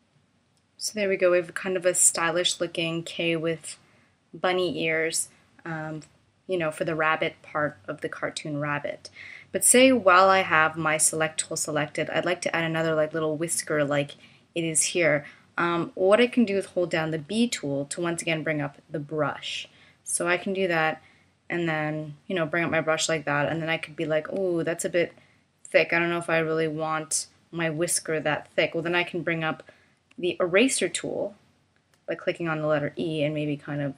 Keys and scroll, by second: 17.2 b, 30.1 e.